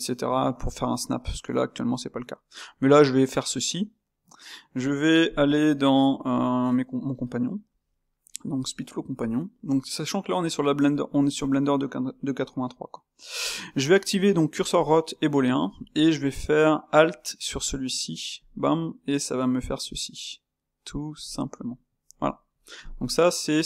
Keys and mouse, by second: 1.5-6.1 shift+right drag, 6.1-21.3 drag, 21.5-22.9 middle drag, 22.9 click.